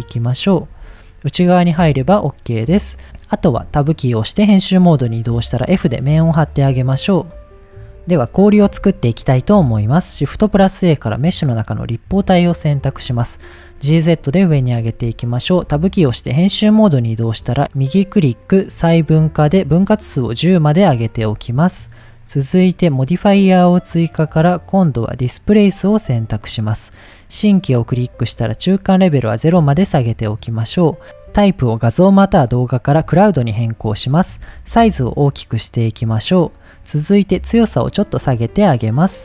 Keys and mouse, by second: 0.4 click, 0.7 Tab, 1.0 drag, 1.6 middle click, 3.0 Tab, 3.4 Tab, 4.6 middle click, 6.0 f, 6.6 Tab, 8.9-9.2 shift+middle drag, 10.3 shift+a, 12.8 g, 13.0 z, 13.7 click, 14.1 middle click, 14.5 Tab, 15.1 shift+middle click, 17.7-18.8 right drag, 19.7 click, 21.2 Tab, 22.3 click, 25.5 click, 27.0 click, 28.3 click, 30.0 click, 32.2-33.2 drag, 33.9 shift+middle drag, 35.2 click, 36.7 click, 37.6-39.2 drag.